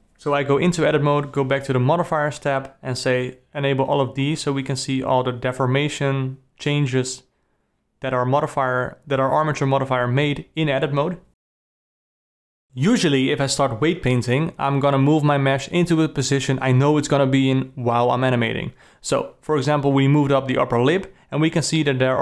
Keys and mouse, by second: 0.3 Tab, 2.2 click, 2.8 click, 3.9 click, 8.1 Tab, 9.8 q, 10.5-14.8 drag, 15.7 click, 16.6-17.7 drag, 17.9 click, 18.8 click, 19.1 click, 20.3-21.8 drag, 21.9 click.